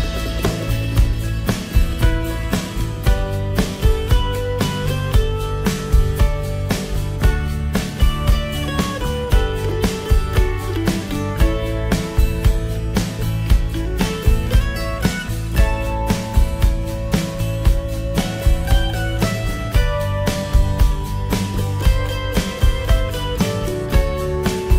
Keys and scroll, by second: 8.5 ctrl+t.